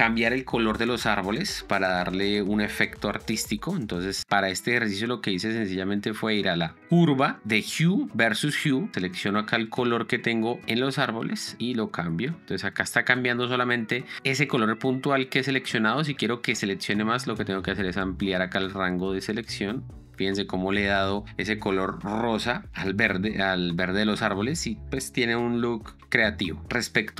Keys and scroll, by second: 26.0 shift+d.